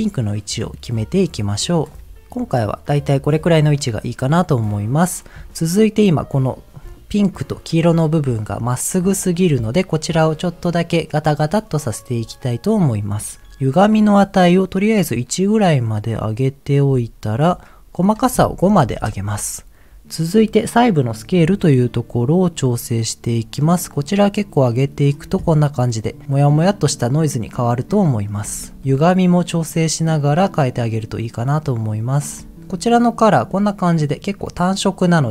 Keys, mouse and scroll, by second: 2.6-3.7 middle drag, 5.8 middle click, 7.9 middle click, 8.9 middle click, 11.9-13.0 scroll up 1, 13.4 ctrl+z, 14.5-17.3 shift+drag, 17.9-18.9 drag, 21.9-25.1 shift+drag, 26.2 middle click, 26.7-27.8 middle drag, 28.0 middle click, 29.4-32.2 shift+drag, 32.7 middle click, 35.0 middle click.